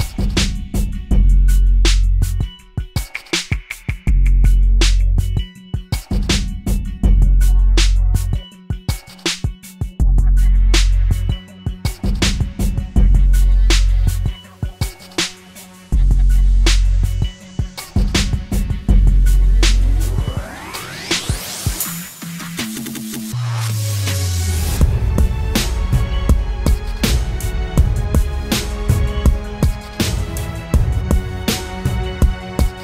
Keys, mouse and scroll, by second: 3.0 alt+click, 7.7-8.9 typing, 10.5 typing, 15.0-16.5 scroll up 1, 16.7 double click, 25.2 ctrl+t, 27.8 alt+shift+click.